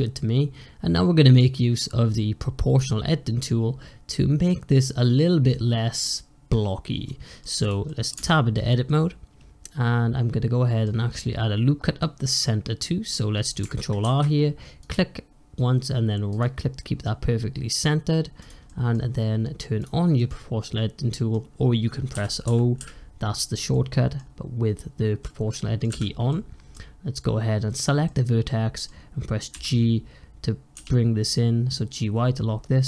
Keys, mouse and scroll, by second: 7.5 click, 7.8 middle drag, 8.0 Tab, 8.4-11.8 middle drag, 11.9-13.9 middle drag, 13.9 ctrl+r, 16.9-18.3 middle drag, 18.3 click, 18.5-19.7 middle drag, 19.7 click, 20.0-22.0 middle drag, 22.0 o, 22.3 o, 22.7 o, 23.6-25.8 middle drag, 25.8 o, 26.2-27.6 middle drag, 27.6 click, 27.9-29.4 middle drag, 29.4 g.